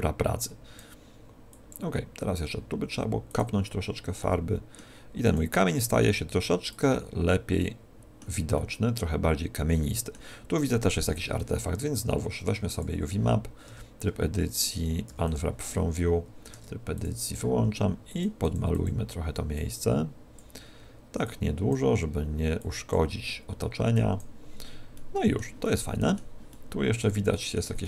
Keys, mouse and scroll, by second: 1.5 click, 4.1 middle click, 5.2 click, 7.5 middle click, 8.4 middle click, 12.6 click, 13.6 Tab, 15.0 u, 16.4 Tab, 16.9 click, 18.0 click, 19.0 click, 20.0 click, 24.8 middle click, 25.5 middle click, 26.4 middle click, 27.2 middle click, 27.7 middle click.